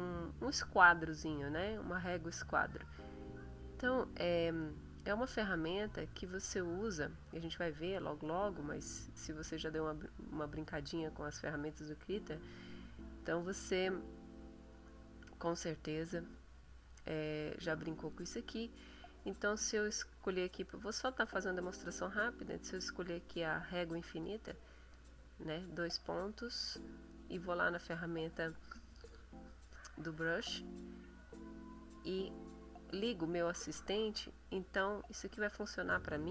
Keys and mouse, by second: 4.6 click, 18.1 click, 24.0 click, 24.9 click, 27.2 click, 32.6 click, 34.9 click.